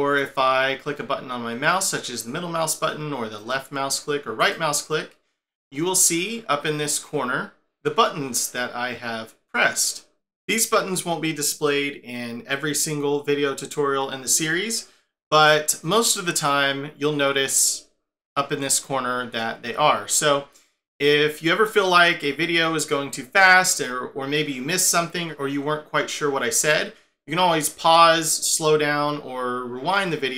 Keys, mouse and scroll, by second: 1.9 middle click, 3.4 click, 4.4 right click, 18.6 middle click, 19.7 scroll down 2, 20.4-21.0 scroll up 1, 21.0 middle click, 29.9 middle click.